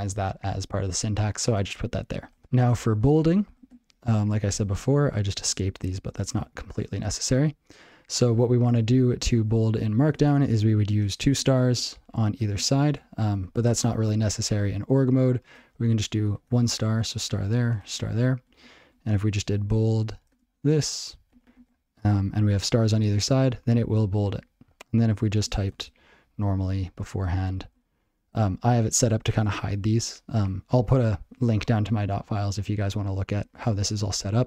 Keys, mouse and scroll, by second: 2.2 ctrl+n, 2.4 Tab, 2.7 ctrl+n, 2.9 ctrl+n, 3.4 ctrl+a, 4.2 Tab, 4.4 ctrl+f, 4.7 ctrl+b, 4.9 ctrl+b, 5.3 ctrl+d, 5.5 ctrl+n, 5.7 ctrl+n, 5.8 ctrl+n, 6.0 ctrl+n, 6.2 ctrl+p, 6.3 ctrl+d, 6.6 ctrl+p, 6.8 ctrl+p, 6.9 ctrl+p, 9.9 ctrl+n, 10.0 ctrl+n, 11.4 *, 11.7 *, 12.7 *, 13.2 *, 13.2 ctrl+g, 19.5 ctrl+p, 19.6-21.3 typing, 19.8 ctrl+p, 21.4 ctrl+g.